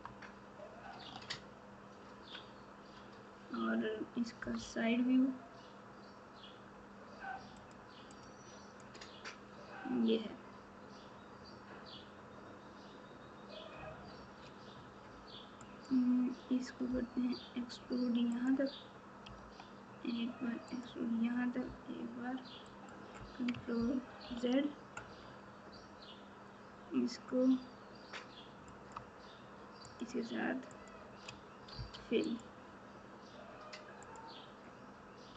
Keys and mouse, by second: 1.0 1, 7.5 click, 8.1 click, 24.2 ctrl+z.